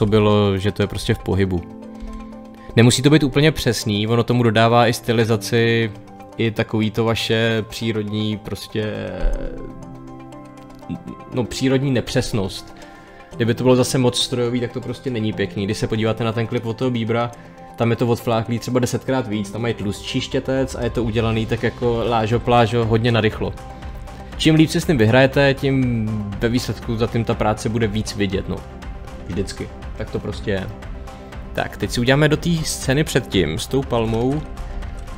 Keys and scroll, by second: 2.0 Page_Down.